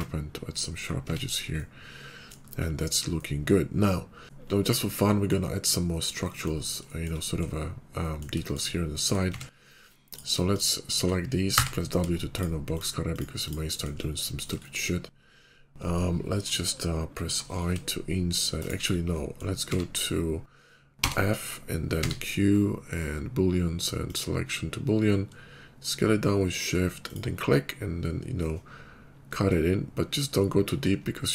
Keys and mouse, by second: 1.0 Tab, 2.5-9.2 shift+middle drag, 9.2 Tab, 10.3 shift+middle click, 10.4 shift+click, 10.5-12.5 shift+middle drag, 11.4 w, 12.5 shift+click, 12.7 shift+middle click, 13.0 shift+click, 13.4-31.3 shift+middle drag, 17.1 i, 19.5 q, 20.9 f, 21.9 q.